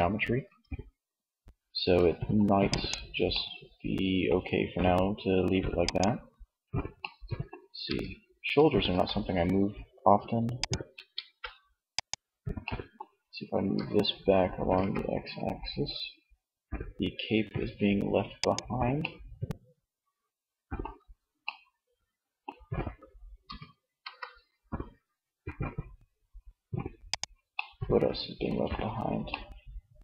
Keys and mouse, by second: 0.8 Tab, 2.9 middle click, 4.6-6.0 middle drag, 6.1 middle click, 6.9 r, 9.8 click, 10.5 ctrl+z, 11.8 middle click, 12.6 right click, 12.8 r, 17.7-19.3 middle drag, 21.4 middle click, 22.6 r, 26.7-28.2 middle drag.